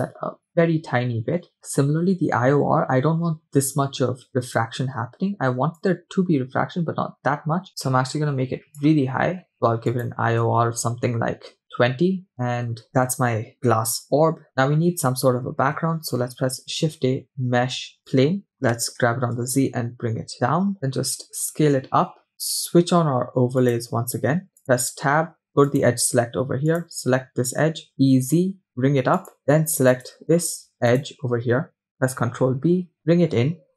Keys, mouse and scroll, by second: 1.5 middle click, 1.5 scroll up 3, 5.8-8.9 shift+drag, 9.9-11.6 shift+drag, 12.9 shift+middle click, 12.9 scroll down 1, 16.0 shift+a, 18.5 scroll down 2, 19.1 g, 20.7 s, 22.3 shift+middle click, 22.3 scroll down 1, 23.7 click, 24.6 Tab, 24.6 click, 25.7 click, 26.7 click, 27.9 e, 29.4-29.8 scroll down 2, 29.9 click, 30.9 click, 32.3 ctrl+b.